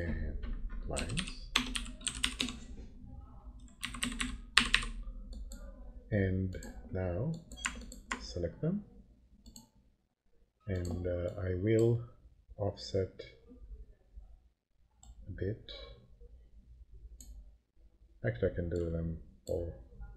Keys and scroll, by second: 0.7-2.9 typing, 3.8 Left, 4.5 Delete, 4.8 End.